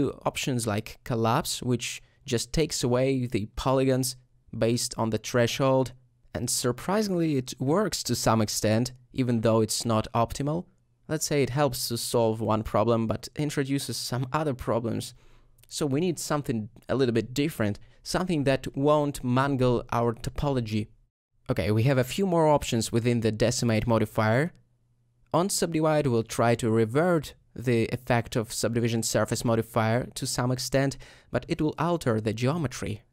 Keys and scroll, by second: 21.7 ;.